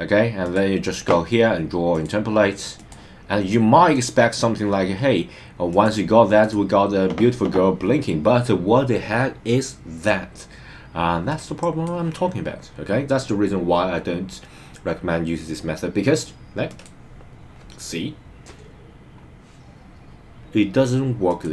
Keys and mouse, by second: 0.4 click, 2.0-3.0 drag, 3.9 click, 5.7 click, 11.3 click, 16.6 click, 21.2 click.